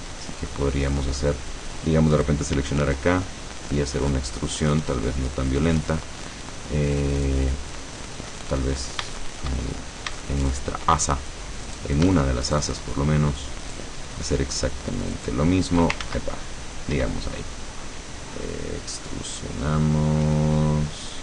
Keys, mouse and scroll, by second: 0.3-0.6 shift+scroll down 1, 0.6 click, 2.7 e, 5.9 click, 6.3 middle click, 7.1 scroll down 1, 7.8-8.1 scroll down 1, 8.4 middle click, 9.3 shift+middle click, 10.3 shift+middle click, 11.8 right click, 12.5 shift+right click, 13.7 shift+right click, 15.3 shift+right click, 16.1 ctrl+shift+z, 17.1 e.